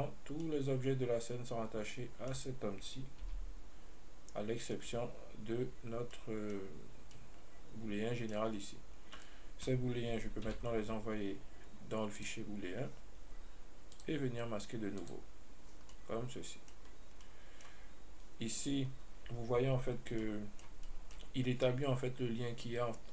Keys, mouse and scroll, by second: 0.0 right click, 0.7-3.5 middle drag, 3.5 g, 6.4-8.8 middle drag, 9.4 right click, 10.8 m, 14.2 click, 15.3 click, 16.2-17.1 middle drag, 20.8-23.1 middle drag.